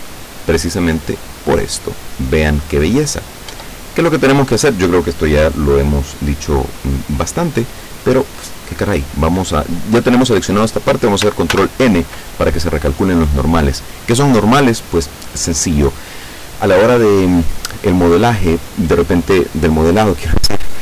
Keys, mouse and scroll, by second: 3.6 Tab, 11.6 ctrl+n, 13.9 right click.